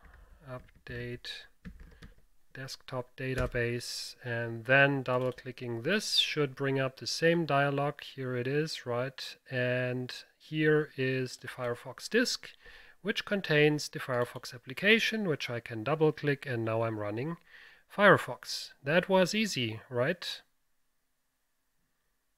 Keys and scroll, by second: 0.0-2.7 typing, 3.4 Return, 6.3 typing.